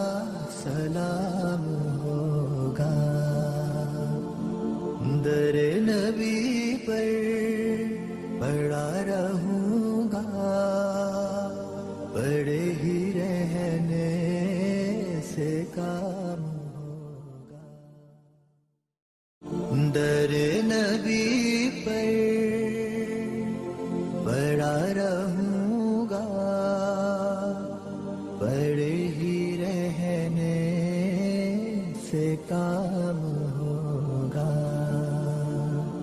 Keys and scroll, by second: 0.7 F4, 6.1 ctrl+g, 7.3 g, 10.9 shift+F2, 13.3 Escape, 18.4 Escape, 19.0 F4, 26.9 c, 28.0 Escape, 30.1 F2, 32.2 alt+c, 32.4 w, 34.7 ctrl+Page_Down.